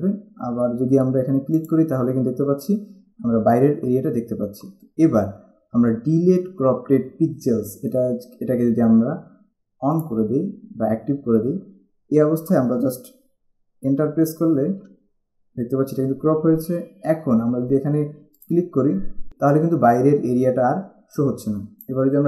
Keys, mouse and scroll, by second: 1.8 click, 10.1 click, 14.0 Return, 18.6 click, 21.3 click.